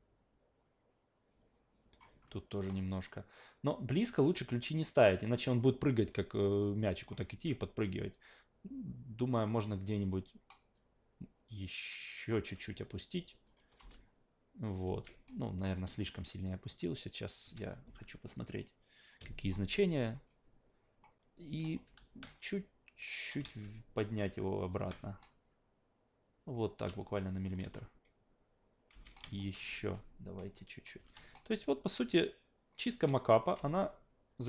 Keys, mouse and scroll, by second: 4.5 click, 6.4 click, 7.3 ctrl+z, 8.0-9.4 drag, 10.7 click, 13.4 click, 13.8 alt+v, 14.8 alt+v, 15.3 click, 17.1 click, 17.4 a, 19.1-19.5 drag, 19.6 f, 20.1 click, 21.6 click, 21.8 w, 22.3 shift+middle click, 23.4 ctrl+z, 24.1 click, 24.7 w, 25.2-26.5 shift+middle drag, 27.4 click, 27.7 alt+v, 28.9 alt+v, 29.6 w, 30.4 click, 31.0 w, 31.3-32.7 shift+middle drag, 33.4 click, 33.6 alt+v.